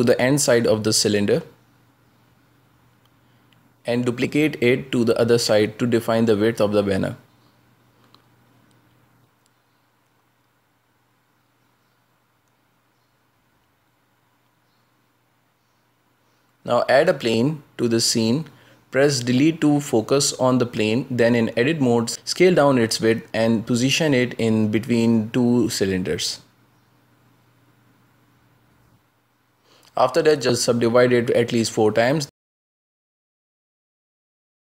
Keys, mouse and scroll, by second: 0.9 scroll down 2, 1.1-2.5 shift+middle drag, 2.5 scroll down 2, 2.8 g, 4.4 shift+d, 6.4 scroll up 2, 6.6 shift+middle click, 7.6 Tab, 8.1-10.0 middle drag, 10.0 scroll down 4, 10.2-10.8 shift+middle drag, 10.8 a, 11.0 a, 11.1 scroll down 1, 11.4-14.2 middle drag, 17.5 shift+a, 20.3 KP_Decimal, 21.6-22.6 middle drag, 22.6 Tab, 23.2 s, 25.4 Tab, 25.9 g, 27.4-28.0 middle drag, 28.0 scroll up 1, 28.4 Tab, 28.7 s, 31.0 middle click, 31.6 w, 32.9 w, 33.6 w, 34.4 w.